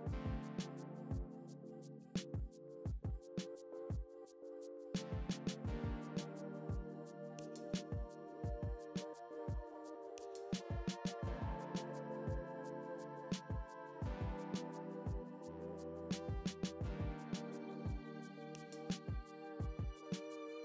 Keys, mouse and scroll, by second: 0.1 ctrl+e, 0.4 a, 1.2 ctrl+e, 1.4 Tab, 1.6 alt+a, 1.8 click, 2.1 scroll down 1, 2.8 KP_0, 3.2-3.9 scroll down 1, 3.9 KP_7, 4.0-4.3 scroll down 1, 4.6 g, 5.3 click, 5.6-8.8 typing, 5.8-6.2 scroll up 1, 6.8 click, 7.2 scroll up 1, 7.8 click, 7.9-8.4 scroll down 2, 8.5 Tab, 8.6 scroll up 1, 8.9 alt+a, 10.6 Tab, 11.0 g, 11.7 click, 11.9 Tab, 12.4 KP_0, 12.6 alt+a, 12.7 z, 12.8 scroll up 1, 13.5 s, 17.1 scroll down 1, 17.4 KP_1, 18.0 scroll down 1, 18.2 scroll up 1, 18.4 click, 18.7 alt+r, 18.9-19.4 scroll up 2, 20.1 click, 20.4-20.6 typing, 20.5-20.6 scroll down 2.